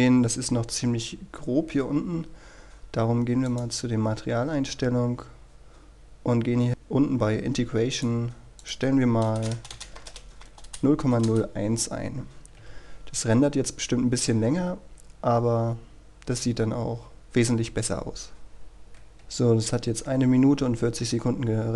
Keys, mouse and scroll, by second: 0.1 scroll up 1, 3.7 click, 4.5-6.1 scroll down 1, 8.1 click, 9.5 BackSpace, 10.1 KP_0, 11.4 Return, 12.7 F12, 13.3-19.2 scroll down 1, 19.2 F9, 21.2 scroll down 1, 21.5-21.7 scroll up 1.